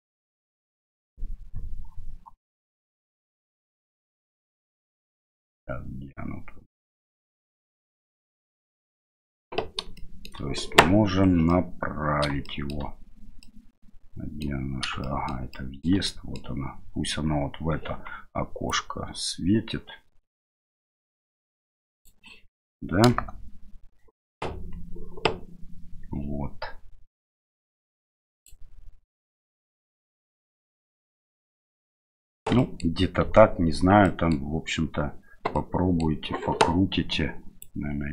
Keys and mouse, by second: 0.6 middle click, 4.7-6.7 middle drag, 7.4 middle click, 8.7 middle click, 9.9-10.3 shift+middle drag, 11.5 middle click, 12.5 shift+middle click, 13.4 middle click, 15.0 shift+middle click, 15.6 shift+middle click, 16.1 middle click, 18.7-22.1 drag, 23.0 KP_0, 27.2-28.5 drag, 32.5 middle drag, 34.0-34.4 middle drag, 35.5-36.0 middle drag, 37.6-38.1 drag.